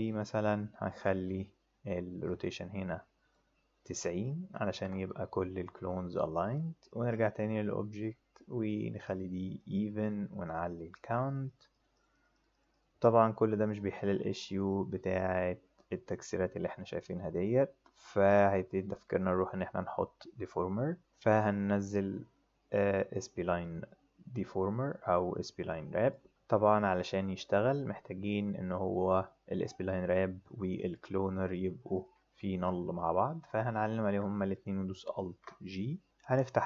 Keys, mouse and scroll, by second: 0.0 click, 2.2-3.3 drag, 3.9 click, 4.6 KP_9, 4.7 KP_0, 5.0 KP_Enter, 6.8 click, 8.6 click, 9.5 click, 10.9 click, 11.7 click, 11.9 click, 12.5 click, 12.7 click, 22.7-26.1 drag, 28.3 click, 31.5 click, 31.9 click, 33.7 shift+click, 35.2 alt+b, 36.6 click.